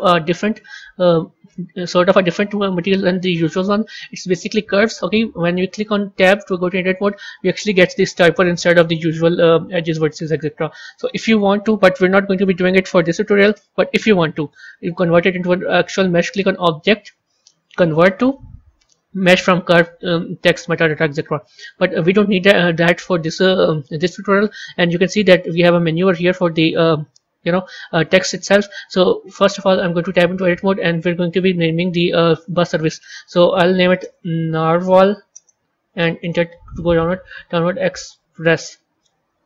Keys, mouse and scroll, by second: 1.4-4.5 scroll up 2, 6.1 Tab, 7.5-9.4 typing, 10.9 Tab, 16.2-19.2 drag, 26.2 click, 30.0 Tab, 30.9-31.2 BackSpace, 31.4 BackSpace, 33.9-35.9 typing, 36.1 Return, 37.3-38.6 typing.